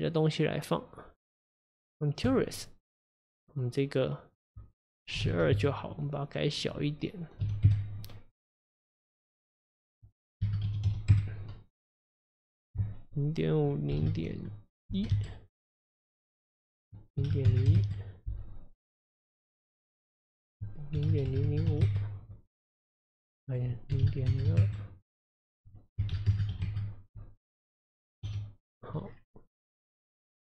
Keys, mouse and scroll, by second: 4.4-15.5 drag, 16.7-19.8 drag, 20.3-21.6 drag, 21.6 KP_0, 23.5-28.3 drag, 28.3 KP_Divide, 29.1-29.7 scroll down 1, 29.7 scroll down 5, 29.9 scroll up 1, 30.1-30.4 scroll down 2.